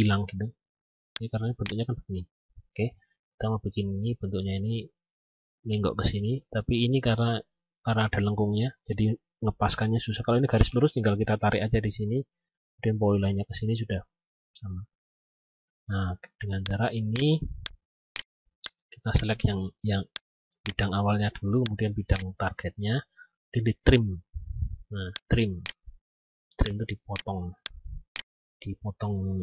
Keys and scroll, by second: 2.9 ctrl+z.